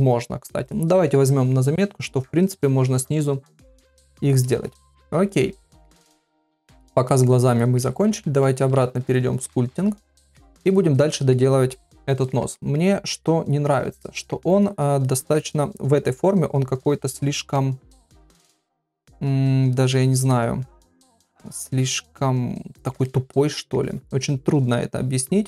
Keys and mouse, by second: 0.0 x, 6.7 ctrl+middle click, 7.1 middle click, 7.6 shift+middle click, 8.5 ctrl+Tab, 10.3 middle click, 10.6 middle click, 12.0 middle click, 12.6 ctrl+middle click, 13.2 middle click, 14.0 ctrl+middle click, 15.0 middle click, 17.5-19.9 middle drag, 20.3-22.7 middle drag, 23.0 middle click, 24.8 click.